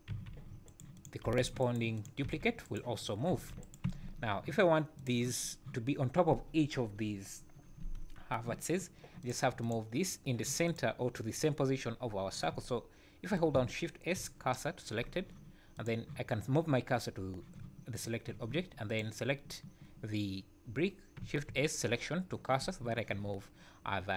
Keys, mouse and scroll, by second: 0.1 g, 1.0 click, 1.2 g, 2.0 click, 2.2 g, 3.0 click, 3.3 g, 3.9 Tab, 5.0 click, 9.2 click, 9.6 click, 10.7 click, 14.1 shift+s, 15.7 click, 17.9 click, 18.9 click, 21.5 shift+s.